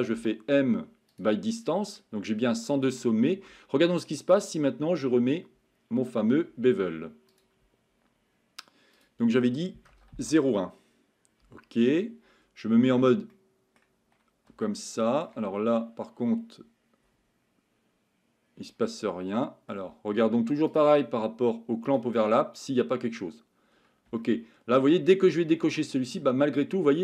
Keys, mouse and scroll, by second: 2.0 middle click, 4.4-7.4 drag, 9.1-10.5 drag, 13.3 middle click, 14.6-15.3 shift+middle drag, 15.4 Tab, 19.4 middle click, 20.7 click, 21.9 click, 24.2-24.8 shift+middle drag, 25.8-27.0 middle drag.